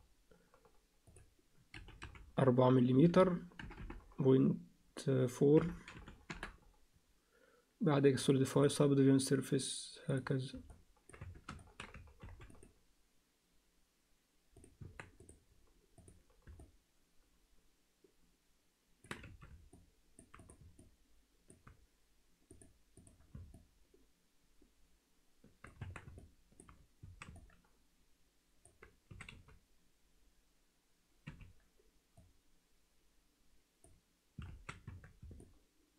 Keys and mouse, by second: 1.1-6.6 drag, 3.1 4, 3.8 BackSpace, 8.2 click, 8.7-10.2 drag, 10.7 alt+middle click, 11.2 Tab, 11.6 ctrl+alt+middle click, 12.2 ctrl+r, 14.8 Tab, 15.2 right click, 16.6-19.0 alt+middle drag, 19.3 alt+a, 19.7 alt+middle click, 20.4 click, 20.8 alt+middle click, 22.6 click, 23.6-25.7 alt+middle drag, 25.8 Tab, 26.3 alt+middle click, 27.0 a, 27.4-28.6 alt+middle drag, 29.1 s, 32.3-33.9 drag, 34.5 alt+a, 34.9 Tab, 35.4-35.9 alt+middle drag.